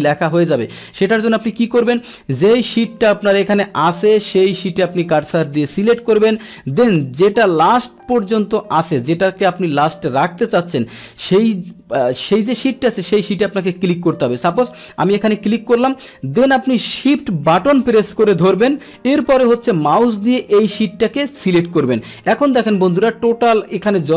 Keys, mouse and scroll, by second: 0.5 click, 3.5 click, 14.5 click, 15.1 click, 21.5 shift+click.